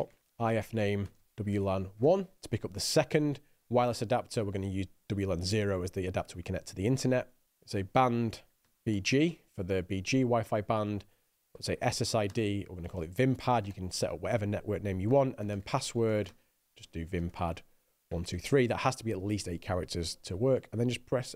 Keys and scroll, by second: 0.0-2.8 typing, 7.6-9.9 typing, 11.2-19.3 typing.